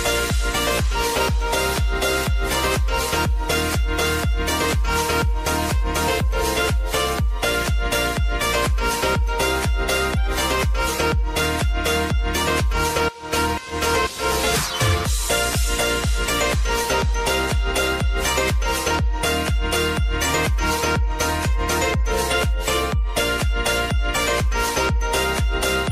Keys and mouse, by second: 0.0 r, 0.8 click, 1.8 Return, 4.1 click, 7.1-7.7 typing, 12.1 click, 13.1 shift+click, 20.8 ctrl+shift+c, 22.1-23.2 typing, 23.3 Return, 24.4 click.